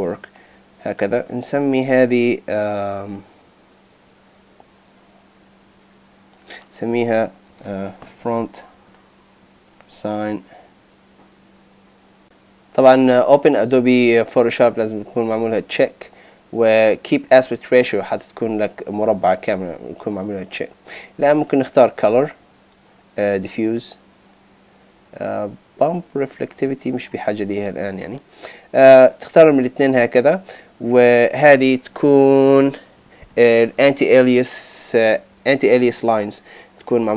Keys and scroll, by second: 7.5 shift+f, 8.7 shift+s.